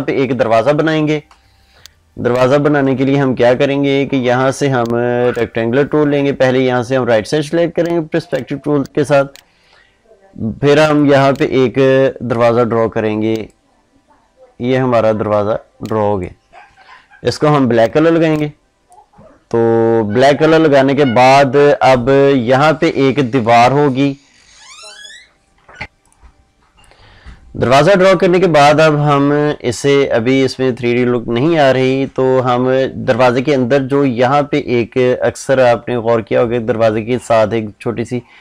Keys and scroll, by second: 1.2 ctrl+space, 25.8 F9.